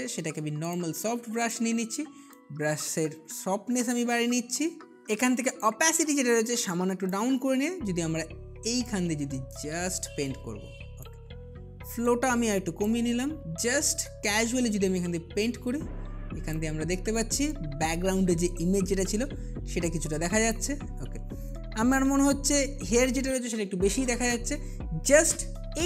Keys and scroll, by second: 5.0 ].